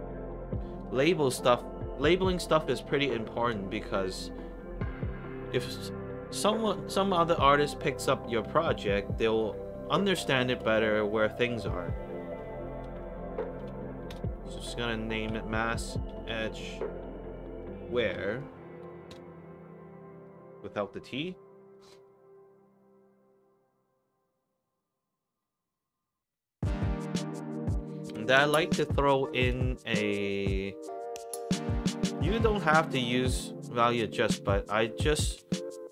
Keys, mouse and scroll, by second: 0.5 click, 3.4 shift+l, 4.1 BackSpace, 13.2-14.8 typing, 15.9-18.8 typing, 20.2 shift+click, 21.6 click, 22.2 click, 22.6 middle drag, 24.8-25.3 middle drag, 26.7 scroll up 3, 27.5 click, 28.0 Tab, 34.1-35.8 typing.